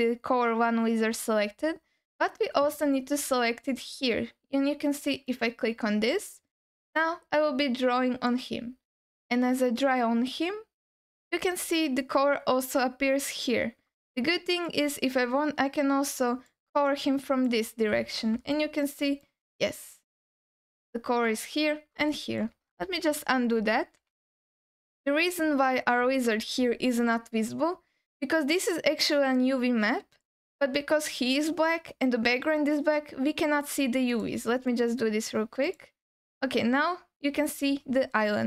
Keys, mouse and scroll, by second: 5.3 click, 6.5-8.4 drag, 13.5-14.1 scroll up 2, 14.1 alt+middle click, 15.6 click, 16.9 click, 18.1 scroll down 1, 18.5 alt+middle click, 19.2-20.7 alt+middle drag, 22.1 alt+middle click, 23.1 ctrl+y, 23.7 ctrl+z, 24.0 ctrl+z, 25.7 scroll down 2, 26.2 alt+middle click, 27.4-28.4 scroll up 1, 34.1 click, 34.7 click, 35.7 click, 37.8-38.4 scroll up 1.